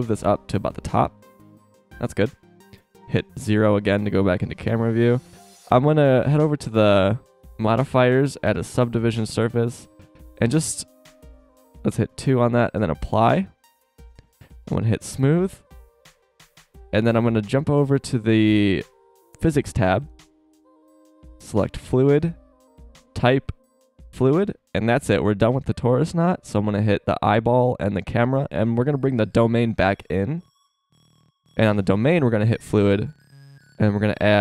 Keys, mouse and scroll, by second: 3.4 KP_0, 12.1 click, 13.9 shift+scroll up 1, 15.7 middle click, 22.2-25.0 drag, 27.3-32.6 drag.